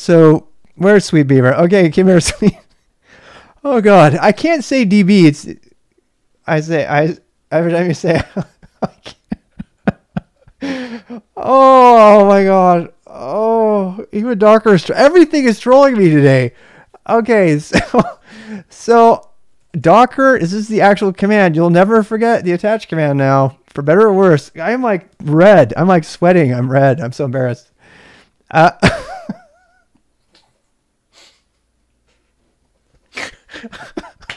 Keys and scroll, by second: 19.5-21.7 typing.